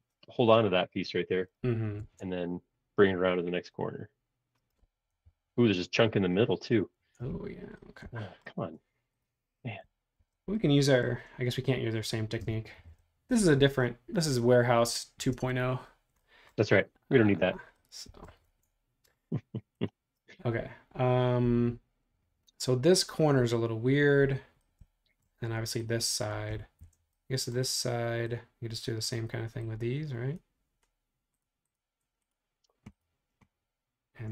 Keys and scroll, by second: 2.1 super+Tab, 5.1 super+-, 5.2 super+-, 7.0 super+Tab, 10.2 shift+g, 12.7 shift+g, 18.5 super+Tab, 26.9 shift+g.